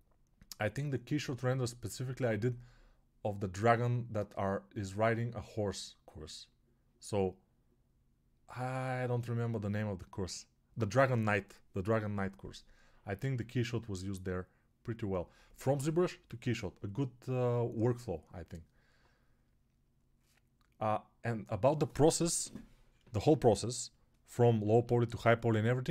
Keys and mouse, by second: 24.6 alt+q.